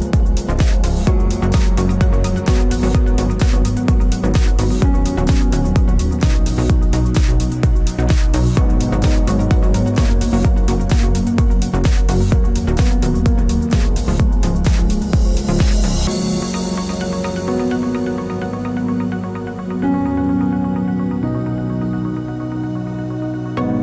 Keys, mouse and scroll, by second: 0.1 e, 1.6 click, 1.7 middle click, 2.2 scroll up 1, 4.4 2, 4.4 drag, 4.9 1, 5.0 click, 5.2 g, 5.9 shift+click, 6.3 g, 7.0 click, 7.2 middle click, 7.7 shift+click, 8.2-9.4 middle drag, 8.6 scroll down 2, 8.8 g, 9.4 click, 9.6 Tab, 12.3 click, 12.4 Tab, 12.6 3, 12.7 click, 12.9 shift+click, 13.4 middle click, 13.4 i, 13.8 click, 15.2 Tab, 15.4 middle click, 17.7 click, 17.8 scroll up 1, 18.0 Tab, 18.3 click, 18.5 2, 18.7 click, 18.9 shift+click, 19.2-20.5 middle drag, 19.6 g, 20.6-21.3 drag, 20.6-22.5 middle drag, 22.2 ctrl+z, 22.5 shift+click, 22.8-23.8 middle drag, 23.2 g.